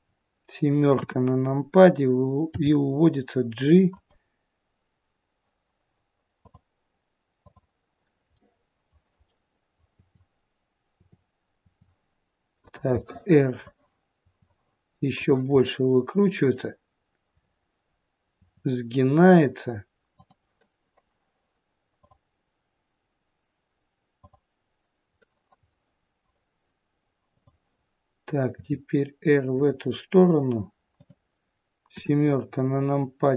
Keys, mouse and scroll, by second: 0.9 KP_7, 2.4 g, 8.3 middle click, 9.2 middle click, 9.8 t, 10.9 t, 11.5 r, 12.9 middle click, 14.2 r, 15.5 middle click, 17.2-17.9 scroll up 1, 17.9-18.3 scroll down 1, 18.3 r, 25.6 middle click, 27.2 click, 28.5 r, 30.9 click, 31.9 KP_7.